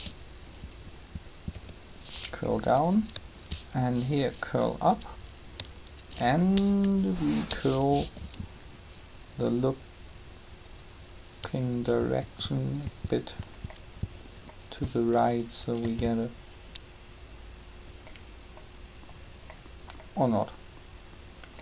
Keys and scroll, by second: 3.9 shift+r, 6.8 7, 12.2 shift+r, 15.8 alt+a.